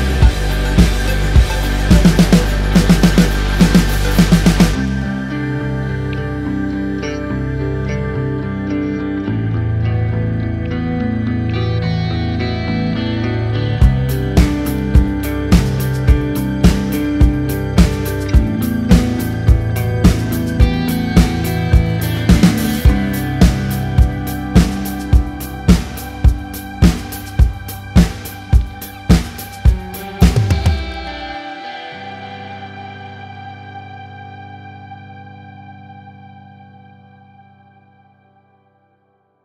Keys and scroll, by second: 3.2 ctrl+-, 3.6 ctrl+=, 4.0 ctrl+-, 4.4 ctrl+=, 5.1 ctrl+-, 9.2 space, 17.7 ctrl+=, 19.5 ctrl+=, 21.5 Return, 26.4 ctrl+-, 26.8 ctrl+=.